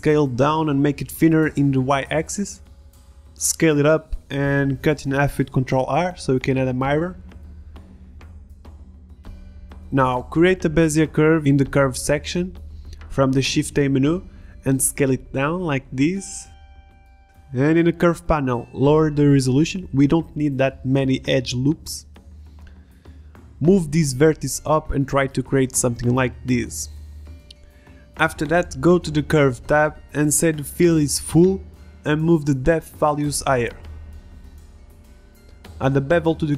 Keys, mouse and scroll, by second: 0.5 s, 1.7-2.2 drag, 2.2 shift+s, 3.9 ctrl+r, 5.2 ctrl+Tab, 5.7 a, 5.9 b, 6.3 a, 6.5 b, 7.7 Delete, 10.0 z, 10.3 drag, 10.8 s, 11.5 s, 12.7 KP_1, 13.0 r, 14.5 r, 16.0 r, 17.1 g, 17.5 click, 17.6 Tab, 18.3-22.2 drag, 18.3-19.1 right drag, 21.8 right click, 22.2 middle click, 22.3 click, 22.7 g, 23.0 click, 25.1 click, 25.6 g, 26.3 click, 26.3 g, 27.3 g, 28.5 middle click, 29.2-33.4 drag, 33.4 Tab, 34.3 g, 34.7 middle click, 34.8 click, 34.9 middle click, 35.1 click, 35.3 middle click, 35.6 click, 35.7 middle click, 36.1 g.